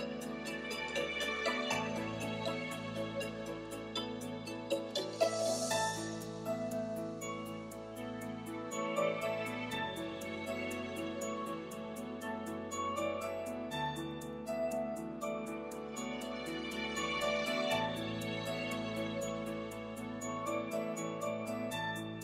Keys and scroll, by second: 15.5-16.6 typing, 16.8 Return, 22.0-22.2 typing.